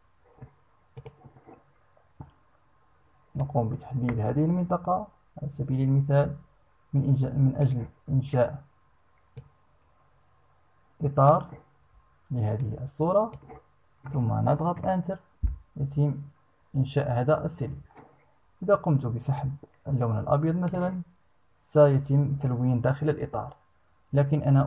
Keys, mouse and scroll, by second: 0.5 click, 2.9-7.3 drag, 8.9-11.1 drag, 12.1 click, 14.3 Return, 18.9-20.5 drag.